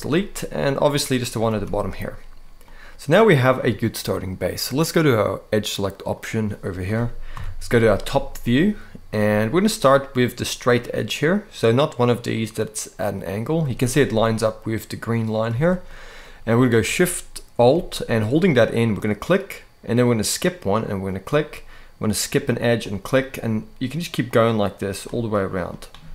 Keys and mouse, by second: 0.9 click, 1.2 x, 2.4 middle click, 7.0 KP_7, 8.0 shift+middle click, 13.5 shift+middle click, 15.4 shift+middle click, 18.7 alt+shift+click, 20.9 alt+shift+click, 22.6 alt+shift+click, 24.7 alt+shift+click, 25.3 alt+shift+click.